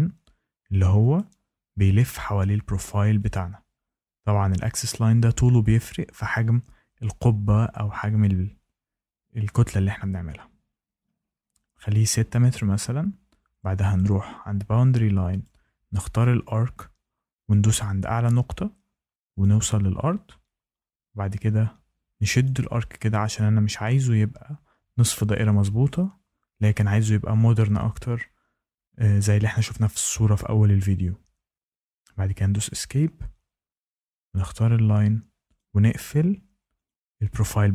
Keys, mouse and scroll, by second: 1.1 click, 3.3 click, 11.9 click, 13.9 click, 15.4 click, 17.4 click, 19.3 click, 22.4 click, 31.8 Escape, 34.3 click, 35.5 click, 36.8 click.